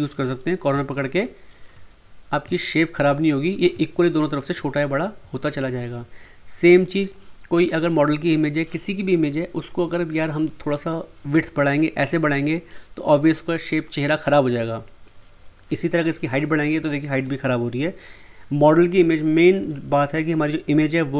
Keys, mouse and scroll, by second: 0.7 click, 0.7-5.5 shift+drag, 5.5 ctrl+z, 6.7 click, 10.1-12.9 drag, 15.7-18.5 drag.